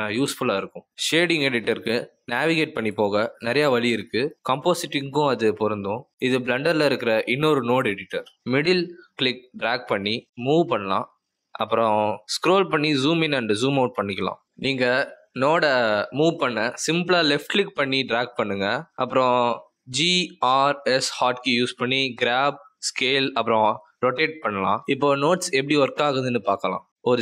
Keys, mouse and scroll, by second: 8.6 middle click, 11.0 middle click, 13.3-14.0 scroll down 6, 14.0 scroll up 6, 14.4-14.9 scroll down 6, 14.9-15.2 scroll up 5, 15.9 scroll up 1, 16.2 click, 17.0 click, 19.2 click, 19.3 shift+click, 19.9 g, 20.9 r, 22.3 s.